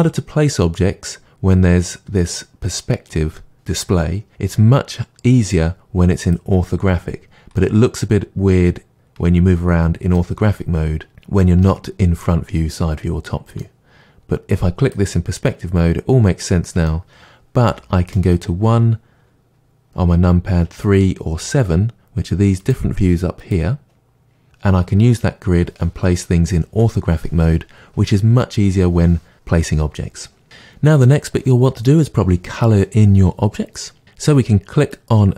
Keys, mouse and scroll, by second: 1.8-6.2 middle drag, 6.2 click, 7.6-14.8 middle drag, 14.8-15.4 drag, 15.4-22.6 middle drag, 17.6 KP_1, 20.6 KP_3, 21.3 KP_7, 22.6 click, 23.4 click, 30.4-34.8 middle drag, 34.8 click.